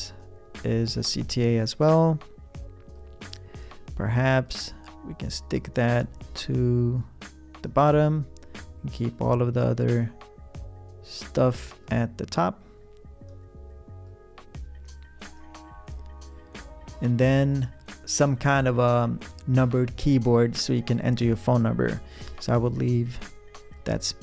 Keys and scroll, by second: 22.3 p.